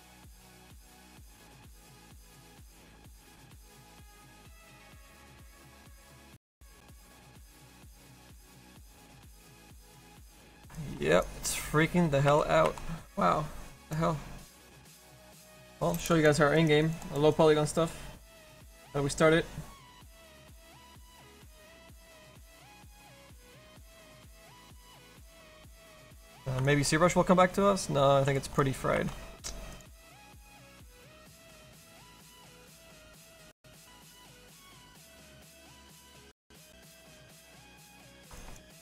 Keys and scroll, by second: 14.6 space, 20.8 space.